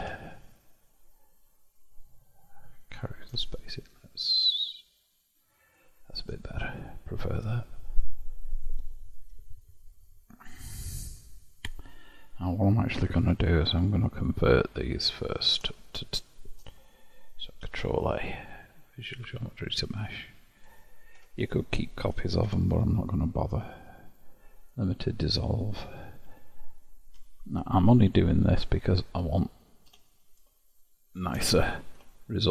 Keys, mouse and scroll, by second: 0.1 Tab, 3.5-10.1 shift+drag, 10.1-13.1 middle drag, 13.5 shift+click, 14.9-17.7 drag, 17.7 ctrl+a, 20.3-21.2 middle drag, 21.2 Tab, 22.5 a, 22.9 Delete, 27.2 KP_7, 28.4 KP_Divide, 28.9-30.0 scroll up 1, 30.0 1, 30.9 shift+middle click, 31.5-32.2 scroll up 4, 32.2 shift+middle click.